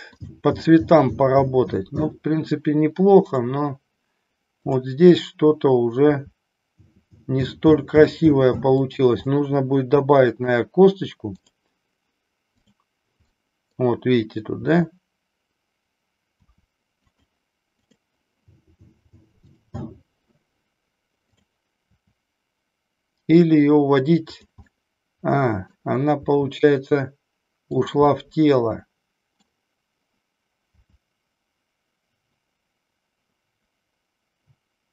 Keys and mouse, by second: 0.2 click, 4.6-5.4 drag, 6.2 r, 8.9 click, 9.4-10.6 middle drag, 11.4 click, 13.3 middle click, 14.6 r, 16.3 r, 17.1 click, 17.9 click, 19.4 click, 21.3 click, 22.1 r, 24.8-25.7 middle drag, 26.3 r, 28.3-29.6 middle drag, 30.7 r.